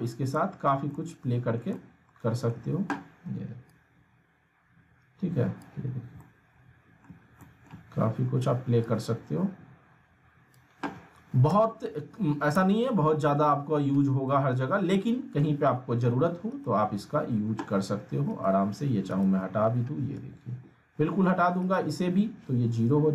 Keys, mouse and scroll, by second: 1.6 scroll down 1, 1.8-3.7 alt+middle drag, 3.7-5.8 drag, 5.9 scroll up 1, 6.2-7.1 alt+middle click, 7.3 scroll down 1, 7.4 alt+middle click, 8.9-9.7 drag, 11.4 z, 12.2 alt+middle click, 12.5 z, 12.9 scroll down 2, 13.2-14.1 alt+middle click, 14.1 scroll up 2, 14.3-15.5 alt+middle drag, 16.5 right click, 20.2 ctrl+z, 21.6 right click.